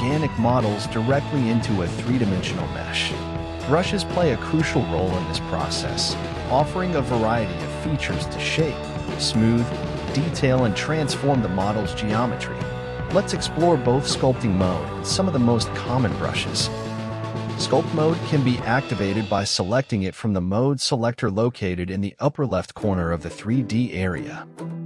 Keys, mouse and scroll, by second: 1.3-3.6 drag, 5.3-7.9 scroll up 3, 9.8 f, 15.0-18.7 drag, 19.8 ctrl+z, 20.3-21.3 drag, 21.3 ctrl+z, 22.2-24.8 drag.